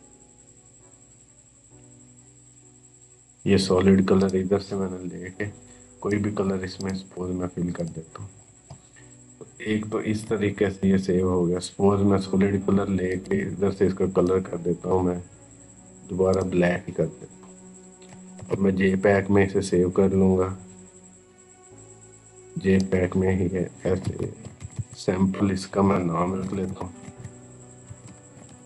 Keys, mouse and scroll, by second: 9.6 scroll up 1, 12.9-16.2 drag, 18.2 ctrl+alt+s, 21.1 click, 23.4-25.1 typing, 27.7-28.6 typing.